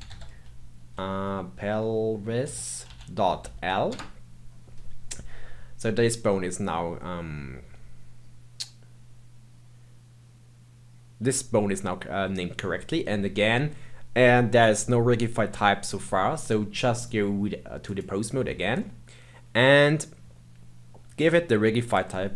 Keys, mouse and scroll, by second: 16.9-18.7 drag, 18.7-21.1 middle drag, 21.1-21.8 scroll down 1, 21.8-22.3 drag.